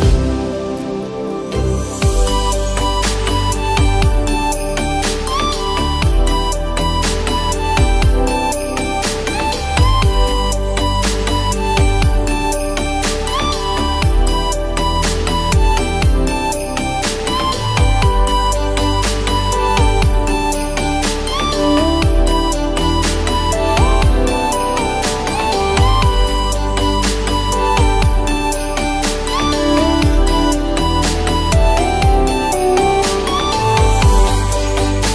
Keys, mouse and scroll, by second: 2.3 click, 5.2 ctrl+t, 6.6 click, 7.6 ctrl+t, 8.2 click, 14.9-19.4 drag, 25.8 ctrl+t, 26.2-28.4 drag, 28.4 Return, 29.8-33.3 shift+drag, 33.3-34.7 drag.